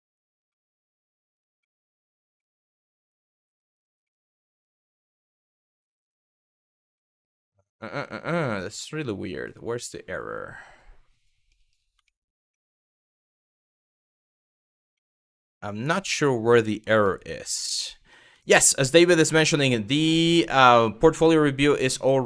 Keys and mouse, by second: 0.1 middle click, 1.3 middle click, 2.0 middle click, 3.1 click, 3.7 middle click, 4.4 middle click, 5.6 click, 6.7-11.2 middle drag, 11.7 shift+middle click, 12.1 shift+middle click, 13.0 middle click, 14.6 middle click, 16.7 middle click, 17.3 shift+middle click, 18.1 shift+middle click, 19.3 shift+middle click, 20.0 middle click, 20.5 shift+middle click, 21.6 middle click.